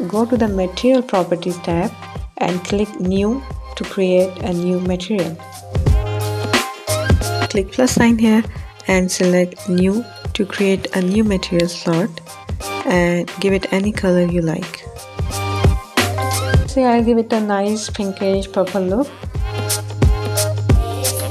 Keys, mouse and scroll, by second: 1.4 click, 2.5-6.9 drag, 8.5-10.0 drag, 11.6 click.